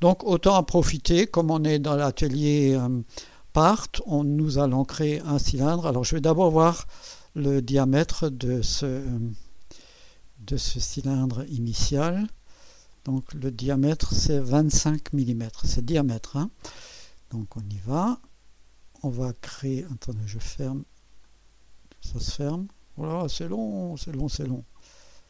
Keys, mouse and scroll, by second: 0.0 click, 7.5 click, 9.2 click, 10.4 scroll up 2, 10.9-11.7 right drag, 12.9-13.7 drag, 18.1 click, 21.2 click, 23.3-24.7 scroll down 2.